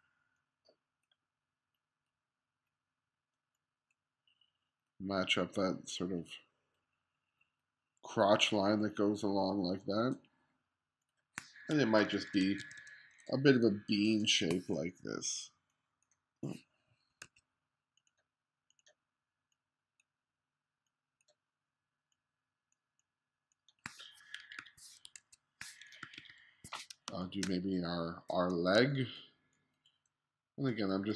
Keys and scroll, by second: 12.3 2, 17.3 super+z, 24.5 1, 25.2 super+z, 26.1 1, 27.1 space, 28.8 space.